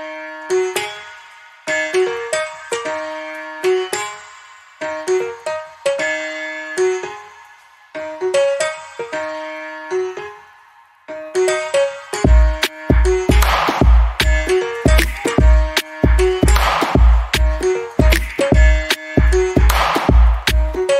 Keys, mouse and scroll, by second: 0.3 click, 0.9 scroll down 1, 1.2 alt+middle click, 2.5 click, 2.9 double click, 5.5 click, 7.0 click, 7.1 double click, 8.2 right click, 9.9 click, 11.6 middle click, 14.8 alt+click, 15.5-16.4 alt+scroll up 2, 16.4 ctrl+d, 17.9 click.